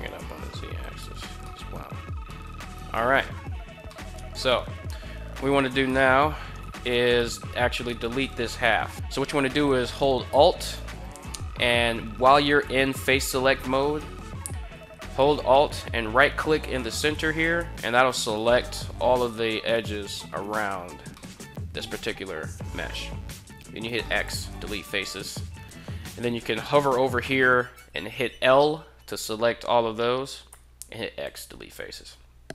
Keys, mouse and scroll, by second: 0.6 click, 1.2-1.7 middle drag, 2.1 middle drag, 2.5 right click, 3.6-3.9 middle drag, 4.1 middle click, 5.4 alt+right click, 6.4 3, 8.7 x, 8.9 ctrl+z, 8.9 a, 12.5 3, 17.1 alt+right click, 18.0-20.5 middle drag, 20.8-21.1 middle drag, 23.0 x, 24.9 right click, 27.7 l, 30.2 x.